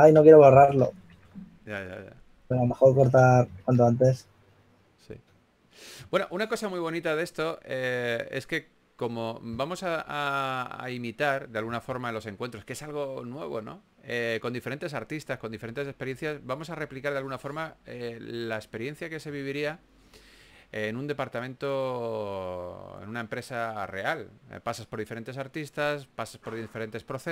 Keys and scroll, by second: 0.3-1.6 typing, 2.9-4.6 typing, 6.3 typing, 8.2 typing, 11.6-12.5 typing, 13.8 typing, 15.8-18.4 typing, 21.6 s, 24.2-24.9 typing.